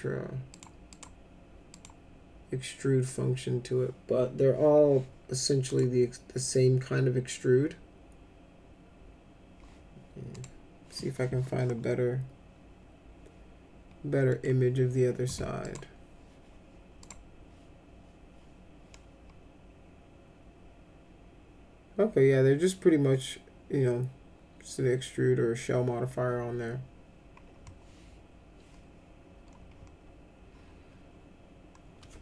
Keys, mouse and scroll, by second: 0.5 click, 0.9 click, 1.7 click, 5.7 click, 10.3 click, 14.3 middle click, 15.6 click, 17.0 click.